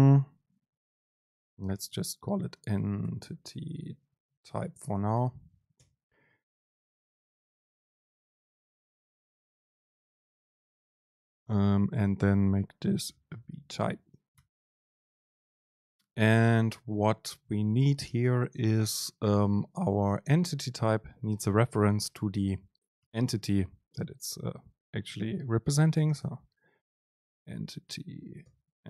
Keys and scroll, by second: 1.8 BackSpace, 5.9 BackSpace, 5.9 super+space, 15.0 Down, 23.2 Return, 27.3 BackSpace, 28.5 BackSpace, 28.6 super+space.